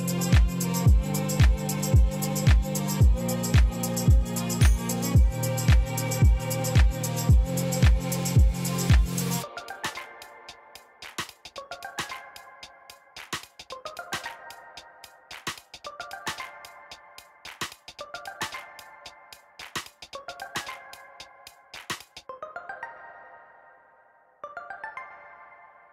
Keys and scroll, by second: 0.3-1.2 typing, 1.6 Return, 4.8 e, 5.3 7, 6.5 b, 7.2 f, 7.5 a, 7.8 4, 8.1 Return, 11.6 1, 11.8 Return, 13.4 ., 13.7 4, 14.0 Return, 24.0 g, 24.6 r, 24.8 a, 25.1 y, 25.4 Return.